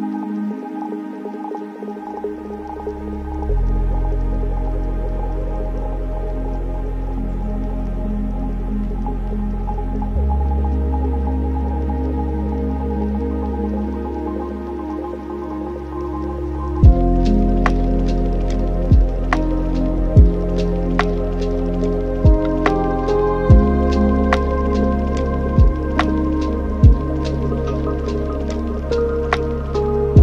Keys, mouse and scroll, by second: 0.0 n, 0.9 click, 1.4 scroll down 6, 1.6-2.2 scroll up 1, 2.2 r, 6.3-6.7 scroll up 4, 7.5 click, 9.3 click, 12.9-17.9 drag, 17.9 middle click, 18.6 n, 19.1-19.9 scroll up 12, 19.9 middle click, 20.6 shift+a, 22.2 o, 23.8 shift+a, 27.1 shift+a.